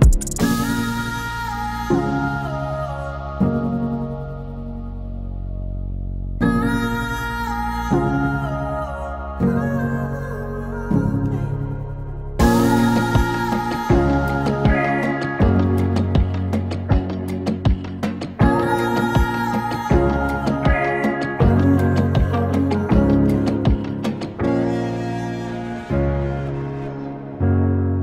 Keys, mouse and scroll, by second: 5.6 u, 6.5-8.4 drag, 8.4 right click, 9.7 click, 10.4 space, 12.3 click, 13.2 n, 13.3 space, 19.0 space, 19.6 click, 24.9 click.